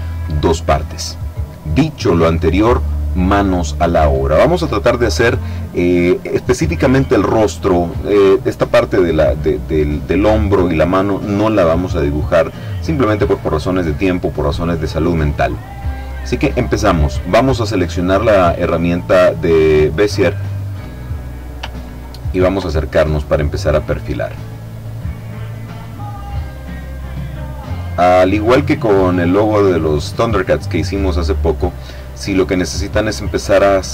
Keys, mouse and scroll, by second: 12.7 click, 22.0-22.5 ctrl+scroll up 1, 25.9 click, 27.2 click, 29.6 click, 32.7 click.